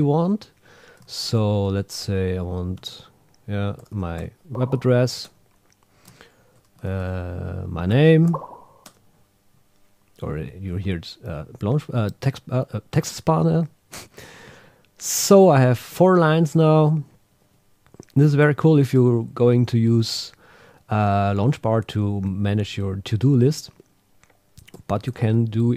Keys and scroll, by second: 2.8 shift+super+a, 5.2 Return, 6.9 shift+super+a, 8.8 Return, 13.9 Return, 16.1 Up, 16.6 shift+super+Down, 17.4 Down, 23.4 super+w.